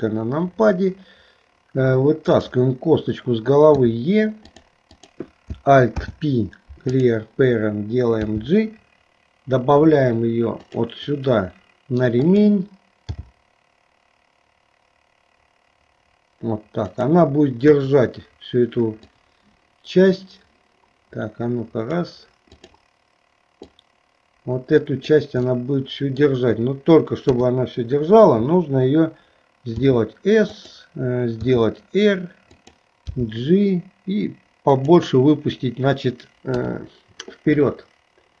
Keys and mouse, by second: 2.3 click, 3.8 e, 4.9 click, 6.1 alt+p, 8.3 g, 12.2 click, 13.3 g, 17.8 KP_1, 19.1-22.0 drag, 22.6 click, 23.9-25.2 drag, 25.6 middle click, 27.3 KP_3, 29.8 s, 31.5 r, 33.1 g, 36.5 KP_3.